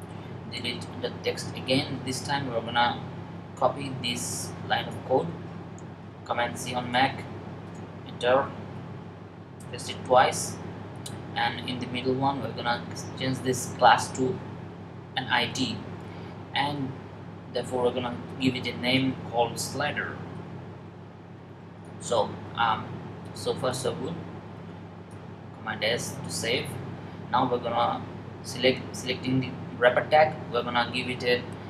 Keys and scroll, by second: 5.9 super+c, 8.5 v, 15.1 typing, 17.5 typing, 19.2-20.5 typing, 24.9 super+s.